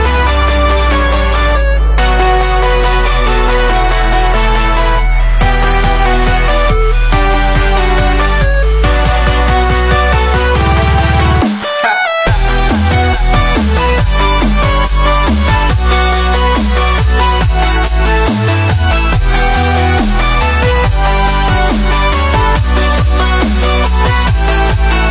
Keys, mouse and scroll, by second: 1.2 ctrl+b, 6.9 click, 7.5 Tab, 8.0 click, 8.4-9.4 shift+middle drag, 9.4 s, 10.5 scroll up 1, 10.6-11.0 middle drag, 11.0 click, 11.7-12.3 middle drag, 12.3 click, 14.3-16.2 middle drag, 16.2-18.4 drag, 18.4 middle drag, 18.7 scroll up 1, 18.8 middle drag, 19.0 click, 19.5 s, 20.7-21.2 middle drag, 21.2 s, 22.6-23.3 drag, 23.4 middle drag, 23.7 drag, 24.0-24.4 middle drag, 24.4 drag, 24.7 scroll down 1, 24.8 scroll up 1, 24.9-25.1 middle drag.